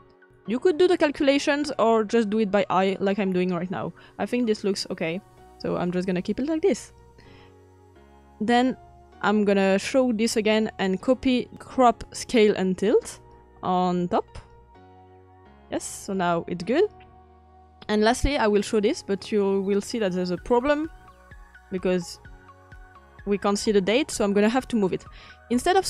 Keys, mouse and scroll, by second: 0.0-13.3 drag.